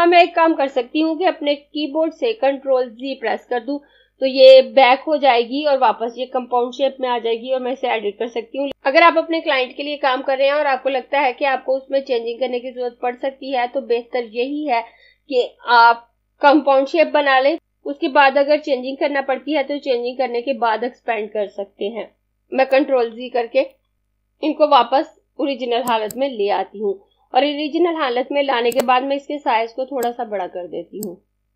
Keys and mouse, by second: 3.2 ctrl+z, 23.4 ctrl+z, 24.0 ctrl+z, 26.0 click, 28.6 click.